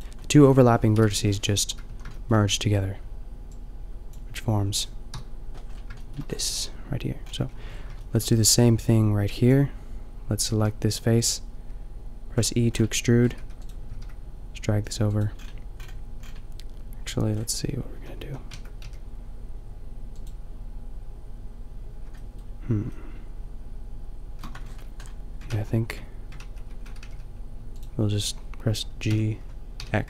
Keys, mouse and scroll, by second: 1.0 KP_5, 1.9 a, 5.1 KP_5, 7.4 a, 7.6 a, 9.3 b, 10.8 g, 12.3 click, 13.4 e, 13.9-14.9 middle drag, 13.9 g, 18.0 a, 18.3 a, 18.6 Tab, 18.8 g, 20.2-21.9 drag, 24.0 middle click, 24.6 Tab, 25.5 ctrl+z, 25.7 ctrl+z, 26.4 ctrl+z, 27.0 g, 29.1 g.